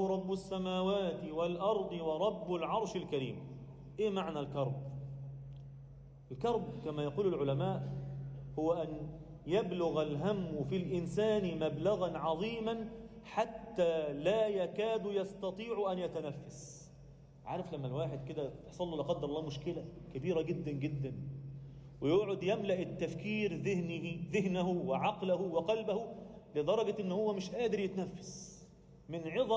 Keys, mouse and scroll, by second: 0.0 f, 0.7 alt+shift+middle click, 8.8 ctrl+r, 9.4 click, 10.7 g, 11.9 shift+click, 12.3 shift+click, 12.5 shift+click, 13.5 f, 15.2 ctrl+r, 16.2 click, 16.6 shift+click, 16.9 shift+click, 17.2 shift+click, 18.1 f, 18.7 click, 19.0 shift+click, 19.9 f, 20.4 f, 20.7 scroll down 1, 21.0 Tab, 21.3-22.5 scroll down 4, 21.8 z, 22.5-22.9 middle drag, 23.3 alt+shift+middle drag, 26.0 scroll up 2, 26.3 Tab, 26.7 shift+middle click, 27.2-27.7 scroll up 1, 27.7 click, 29.1 g.